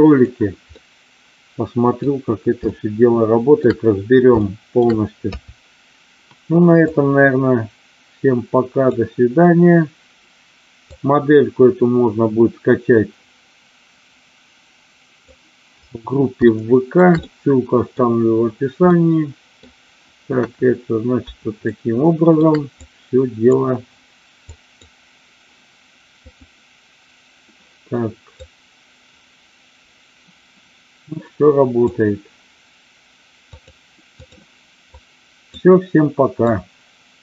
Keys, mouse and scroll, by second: 0.6-2.0 middle drag, 2.7-3.5 shift+middle drag, 4.3-4.9 shift+middle drag, 5.3 KP_3, 7.0-9.0 drag, 11.0-15.3 drag, 16.5-17.0 shift+middle drag, 17.2-17.9 middle drag, 18.8-19.6 middle drag, 20.4 KP_1, 21.6-22.2 shift+middle drag, 22.9-23.5 drag, 24.4-25.0 drag, 26.4-27.5 drag, 28.5-32.0 drag, 33.5 click, 34.8-35.6 drag, 36.4-37.2 drag.